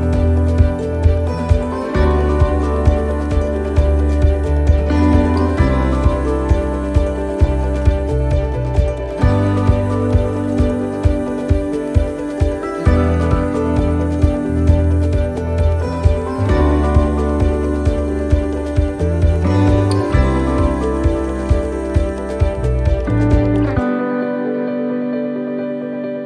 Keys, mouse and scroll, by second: 0.6 right click, 1.3 click, 2.8 middle click, 4.3 middle click, 4.5 ctrl+r, 7.2 right click, 7.8 click, 9.7 shift+middle click, 10.3 middle click, 11.1 shift+middle click, 11.5-12.2 scroll up 5, 14.2-14.8 scroll down 6, 14.9 middle click, 15.4 shift+middle click, 16.1 scroll up 1, 16.4 middle click, 17.7 alt+shift+right click, 18.7 alt+shift+right click, 19.6 alt+shift+right click, 20.1 shift+middle click, 21.1 alt+shift+right click, 22.6 middle click, 23.9 alt+shift+right click, 24.3 middle click.